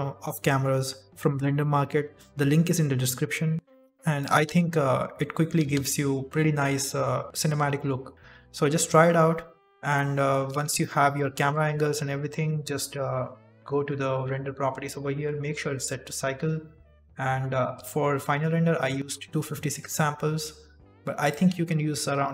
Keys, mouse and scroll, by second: 5.3 click, 5.7 click, 6.8 click.